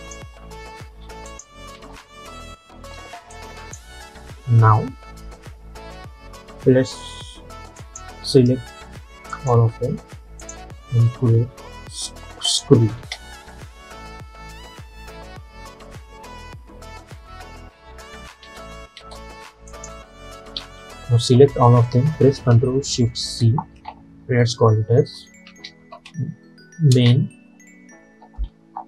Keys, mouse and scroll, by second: 0.3 space, 1.4 click, 1.8 space, 3.4-6.2 drag, 7.8 click, 9.4 shift+click, 13.1 space, 18.2 space, 19.8 click, 20.7 ctrl+a, 23.2 ctrl+shift+c, 25.3-27.0 typing.